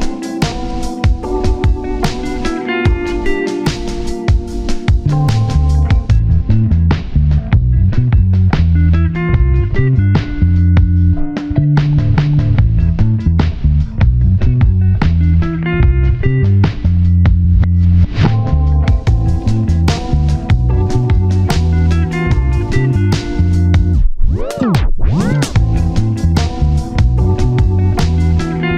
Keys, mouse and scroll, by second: 2.8 scroll down 1, 3.0 1, 4.4 shift+click, 5.6 double click, 6.4 ctrl+KP_7, 6.6-7.0 scroll up 1, 7.3 double click, 16.5 scroll down 1, 16.8-20.2 typing, 17.4 scroll up 1, 18.1 alt+z, 20.3 alt+z, 20.5 shift+middle click, 21.1 ctrl+z, 21.2 ctrl+z, 22.6-24.3 typing, 26.8 shift+middle click, 26.9-27.6 scroll up 1, 27.9 double click, 28.2 alt+click, 28.6 right click.